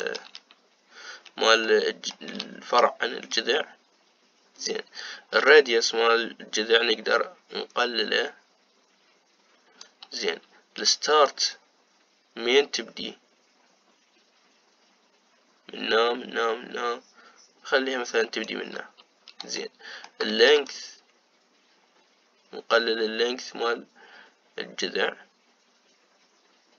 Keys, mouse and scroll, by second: 2.4-6.2 shift+middle drag, 6.2-9.3 shift+drag, 12.0-20.3 shift+drag, 20.3-21.3 shift+middle drag, 21.3-24.5 shift+drag.